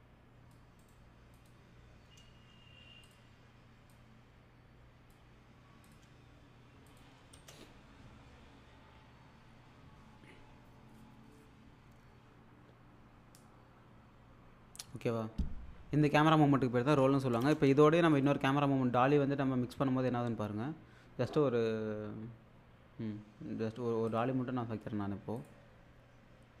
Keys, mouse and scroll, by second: 0.8 right click, 1.3 click, 3.1-5.2 drag, 7.3 space, 17.4 space, 18.1 click, 24.1 click, 25.4 click.